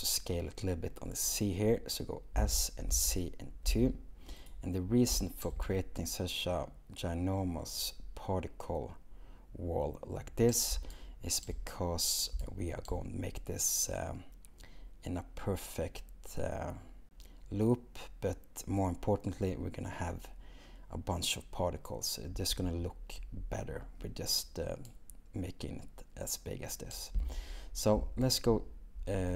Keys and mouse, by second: 2.4 s, 2.9 z, 3.7 2, 4.4 click.